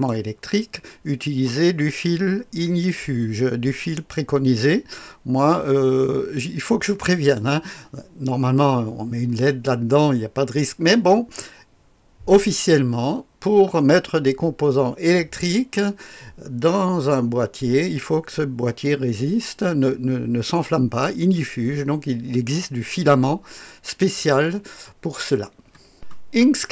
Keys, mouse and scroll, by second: 0.3-3.7 drag, 4.9-7.4 drag, 25.9 click.